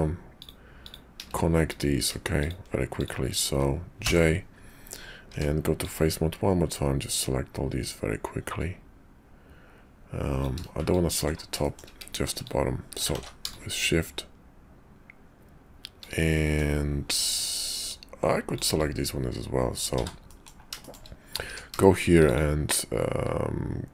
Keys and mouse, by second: 0.4 click, 0.8 click, 1.7 click, 2.4 shift+click, 2.9 shift+click, 4.0 j, 5.3 Tab, 5.8-10.4 drag, 10.9 ctrl+click, 11.6 shift+click, 12.4 shift+click, 13.1 ctrl+z, 13.5-16.0 shift+drag, 16.2 middle click, 17.9 shift+middle click, 19.9 w, 20.3 click, 20.8 shift+click, 21.5 q.